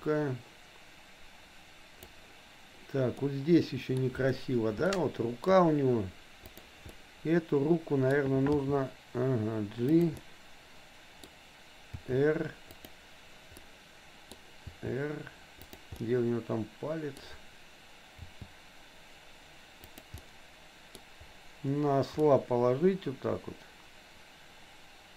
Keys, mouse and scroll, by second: 3.2 middle click, 4.9 shift+middle click, 6.6 click, 6.9 middle click, 7.8 middle click, 8.7 g, 10.2-11.3 middle drag, 12.1 r, 13.6 middle click, 14.8 r, 15.9-17.2 middle drag, 18.2 g, 20.2 middle click, 22.2-25.1 middle drag.